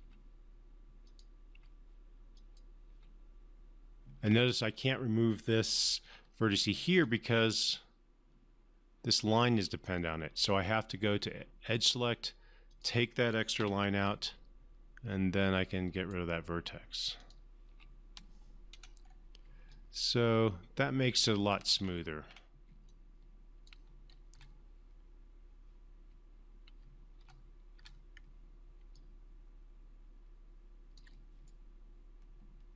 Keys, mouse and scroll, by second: 0.0 click, 0.4 Delete, 1.4 click, 1.9 Delete, 2.7 click, 3.2 Delete, 4.6-5.1 scroll up 1, 5.1-5.9 scroll down 1, 6.1-7.0 alt+middle click, 7.3-9.6 alt+drag, 10.7 right click, 10.9-12.3 right drag, 13.0 click, 13.9 Delete, 14.6-16.5 right drag, 17.6 click, 18.1 Delete, 19.0-19.8 scroll down 2, 20.1-21.9 alt+drag, 22.1 scroll up 1, 23.2-24.1 alt+drag, 24.7 3, 27.5-28.1 typing, 29.3-31.5 alt+drag, 31.8-32.7 right drag.